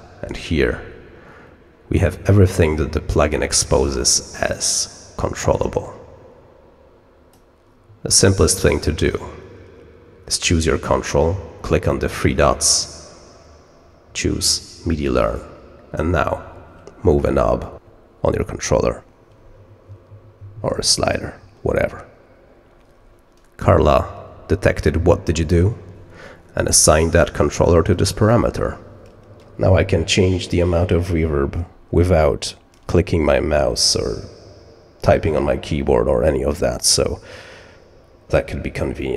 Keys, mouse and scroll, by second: 2.0-7.3 drag, 12.3 click, 15.2 click.